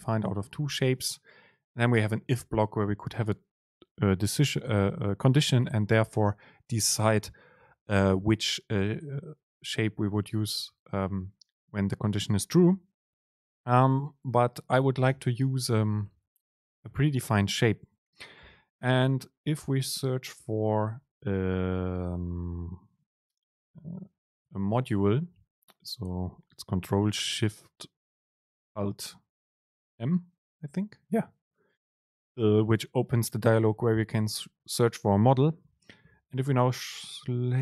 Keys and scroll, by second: 1.0 BackSpace, 1.1 super+space, 5.7 BackSpace, 15.2 super+l, 16.9 ctrl+r, 24.6 ctrl+alt+shift+super+o.